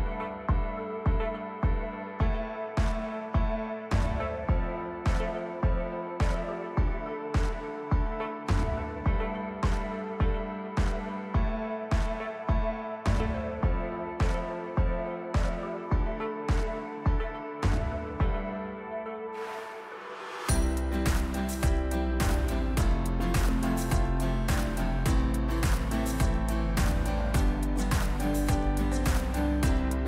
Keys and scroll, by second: 1.0 ctrl+KP_3, 1.8 r, 4.5 shift+z, 5.2 s, 12.7 s, 16.7 s, 18.3 s, 23.7 s, 29.8 s.